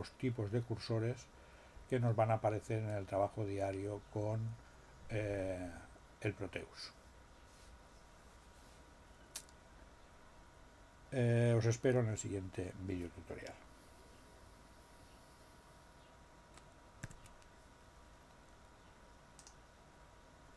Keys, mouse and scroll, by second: 17.0 alt+l.